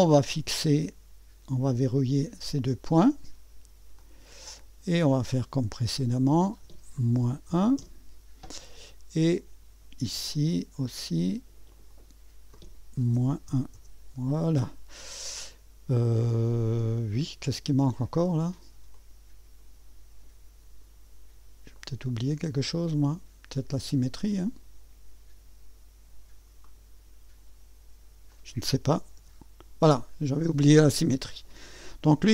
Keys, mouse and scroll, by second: 0.0 click, 1.9 click, 4.0 click, 6.2 click, 6.3 click, 7.2 -, 7.5 1, 7.8 Return, 10.3-11.6 drag, 11.7 click, 13.1 -, 13.5 1, 13.7 Return, 18.9-20.9 drag, 21.8 click, 24.2 click, 26.6 click, 28.3 click, 29.2 s.